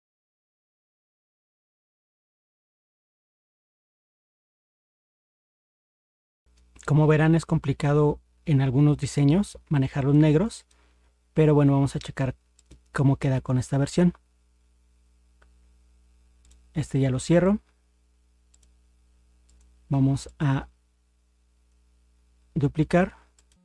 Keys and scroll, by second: 2.7 ctrl+0.